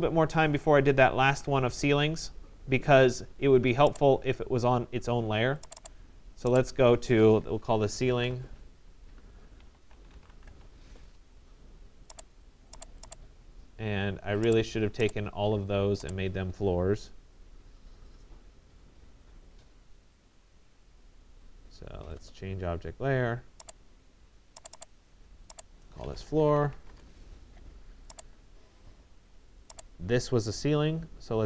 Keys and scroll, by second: 0.8 ctrl+z, 26.5 Return.